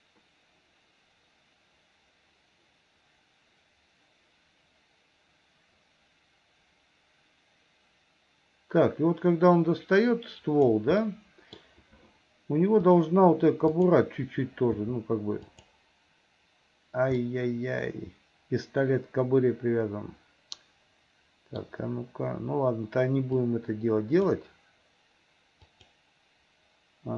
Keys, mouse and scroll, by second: 11.0 middle click, 13.7 click, 14.7 r, 17.2-21.6 middle drag, 23.4 click, 25.7 click.